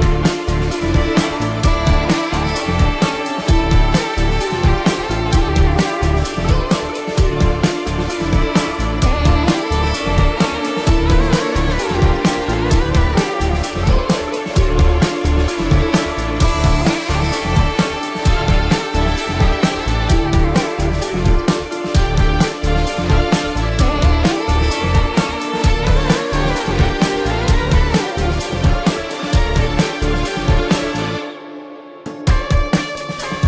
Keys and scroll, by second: 1.5 ctrl+alt+z, 2.4 space, 8.0 ctrl+=, 8.2 space, 8.5 ctrl+=, 9.2 ctrl+=, 9.3-11.1 typing, 9.6 ctrl+-, 12.4 space, 13.2 ctrl+alt+z, 13.8 space, 15.6 ctrl+-, 16.8 ctrl+-, 17.0 space, 17.2 ctrl+-, 17.4 space, 18.7 ctrl+alt+z, 18.8 ], 19.0 ], 19.8 ], 20.4 ], 20.6 ctrl+alt+z, 22.6 space, 25.6 ctrl+=, 26.0 ctrl+=, 26.3 ctrl+-, 26.5-28.8 typing, 28.1 ctrl+alt+z, 30.1 ctrl+alt+z, 30.7 ctrl+-, 32.7 ctrl+=.